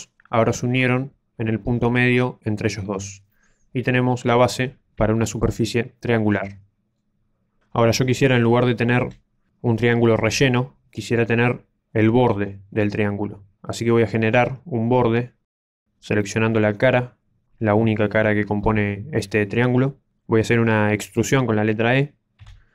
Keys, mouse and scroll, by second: 3.2 middle click, 4.5 a, 5.1 shift+middle click, 6.0 middle click, 9.0 KP_7, 16.0 click, 16.7 right click, 22.3 e.